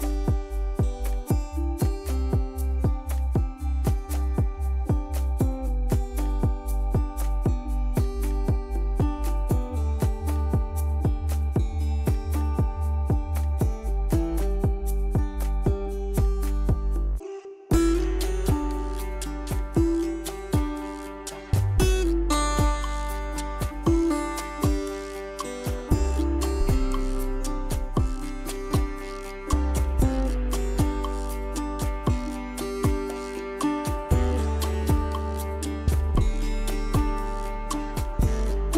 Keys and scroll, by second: 0.2 z, 1.7 z, 3.0 z, 7.7 ctrl+z, 9.2 z, 14.2 ctrl+d, 16.8 ctrl+z, 21.7 ctrl+alt+z, 22.9 ctrl+d.